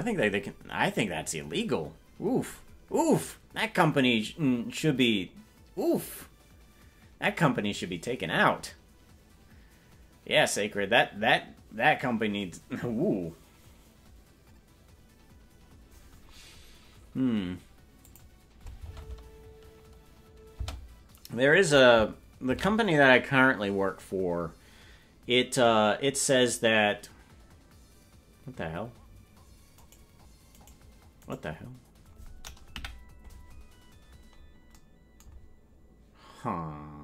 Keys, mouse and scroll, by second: 18.1 click, 20.7 space, 25.9 ctrl+s, 29.9 right click, 32.8 right click, 32.8 KP_Decimal, 33.6 scroll down 3, 33.7 scroll up 1, 33.7-34.0 scroll down 1, 34.0-34.8 scroll down 8.